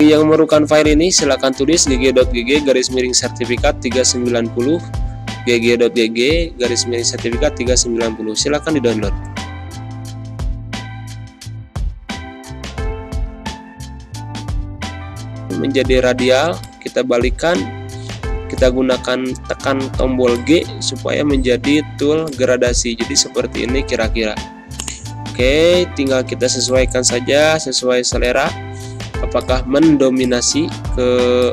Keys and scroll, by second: 18.0 g.